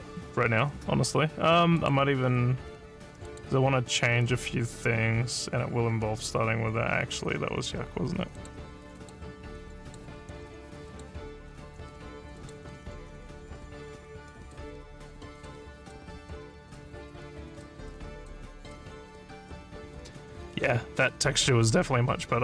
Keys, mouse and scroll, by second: 1.8 click, 3.3 click, 8.4 click, 9.0 click, 9.8 click, 10.9 click, 12.4 click, 14.4 click, 15.4 click, 15.8 click, 16.6 click, 17.5 click, 18.2 click, 18.6 click.